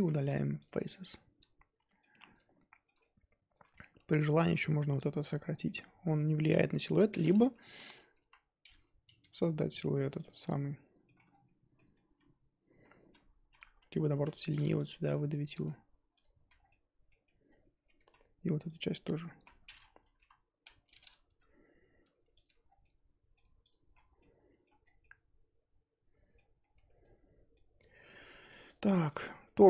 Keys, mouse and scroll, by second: 0.0 z, 0.6 x, 0.8 scroll down 4, 1.1-2.1 middle drag, 2.1-2.6 scroll up 4, 2.7-3.9 shift+middle drag, 3.9 2, 4.0-4.4 scroll up 2, 4.4 1, 5.1 click, 5.4 scroll down 3, 5.6-6.6 middle drag, 6.6-7.8 scroll up 2, 7.8 KP_3, 8.7-9.2 scroll up 2, 9.2 g, 10.4-11.2 middle drag, 11.2-11.7 scroll down 4, 11.7-12.2 middle drag, 12.2-15.0 typing, 12.3-12.8 scroll up 1, 13.5-13.8 scroll up 3, 16.4 z, 16.6 scroll down 4, 16.7 middle click, 17.1 Tab, 17.5 scroll down 1, 17.7 scroll up 2, 18.0 z, 19.0 click, 19.4 z, 19.5-20.2 scroll up 4, 20.2 KP_1, 21.2 g, 22.4 Tab, 22.6 scroll down 3, 22.8-23.6 middle drag, 23.6 click, 23.9 z, 24.0 scroll down 2, 24.2-24.8 middle drag, 24.8 scroll down 1, 25.0-26.6 middle drag, 26.6 scroll up 1, 26.7 Tab, 27.0-27.6 middle drag, 27.6 scroll up 1, 27.9 Tab, 28.1-28.7 middle drag, 28.7 click, 28.9 shift+middle drag, 29.1 scroll up 1, 29.4-29.6 middle drag.